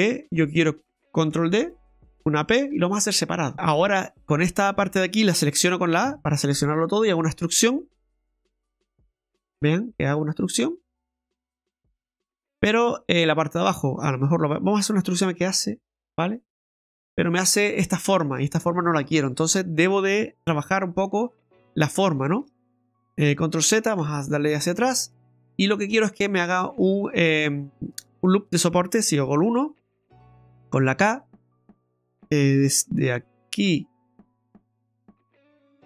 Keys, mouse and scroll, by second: 1.3 shift+d, 2.7 p, 3.5 Tab, 3.5 right click, 3.5 middle click, 4.1 right click, 6.0 a, 6.8 middle click, 7.7 middle click, 8.4 e, 12.4 middle click, 13.3 right click, 13.7 middle click, 15.1 e, 16.8 middle click, 17.8 shift+middle click, 19.2-19.7 scroll up 1, 21.5-21.8 scroll down 2, 21.9 middle click, 22.4 shift+middle click, 23.2 ctrl+z, 23.6 ctrl+z, 24.2-25.3 scroll up 6, 25.3 middle click, 25.9 shift+middle click, 26.3 scroll up 1, 26.3 middle click, 26.9 scroll down 1, 29.3 KP_1, 30.7 KP_1, 30.7 k.